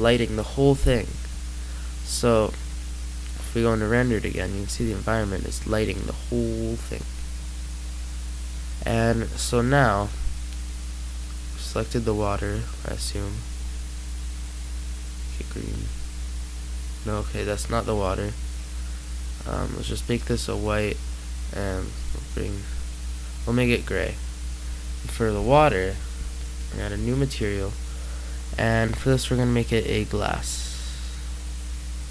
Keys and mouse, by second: 6.2 middle click, 11.0-12.0 right drag, 12.3 middle click, 23.6 middle click, 24.7-26.2 right drag, 26.2 click, 26.5 right click.